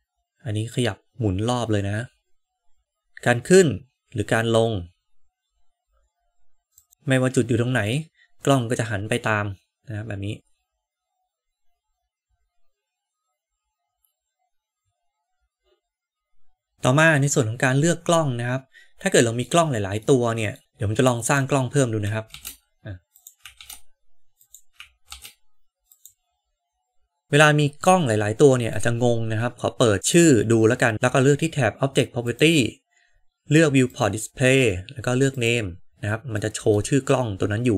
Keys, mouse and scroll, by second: 2.8 g, 16.7-19.4 middle drag, 20.0 middle click, 20.6 shift+a, 21.1 click, 22.2 shift+d, 23.5 shift+d, 25.1 shift+d, 27.2-28.7 middle drag, 32.1 click, 33.8 drag, 35.2 click, 36.3-37.1 middle drag.